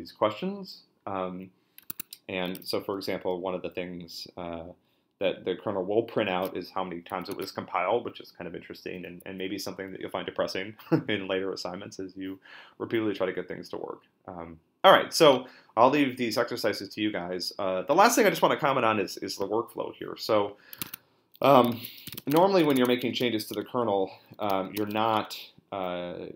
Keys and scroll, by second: 1.9 Tab, 7.3 super+Tab, 20.9 Tab, 21.7 ctrl+l, 21.8-25.5 typing.